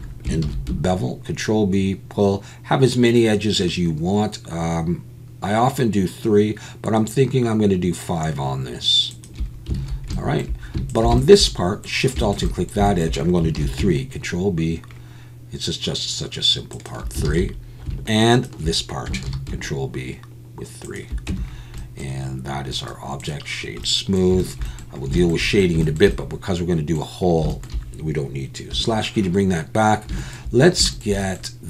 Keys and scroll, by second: 0.4 ctrl+b, 9.8 alt+a, 13.6 ctrl+b, 17.3 alt+a, 19.3 ctrl+b, 21.3 Tab.